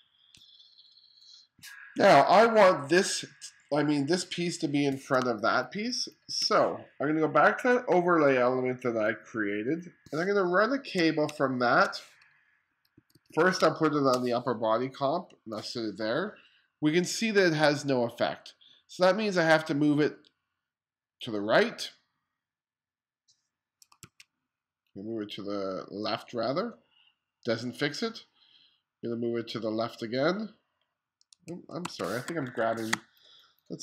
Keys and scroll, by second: 5.3 space, 10.4 space, 11.3 space, 12.7 2, 13.7 space, 24.0 super+z, 24.1 super+z, 31.4 super+z, 31.5 super+z, 32.3 1, 33.0 space.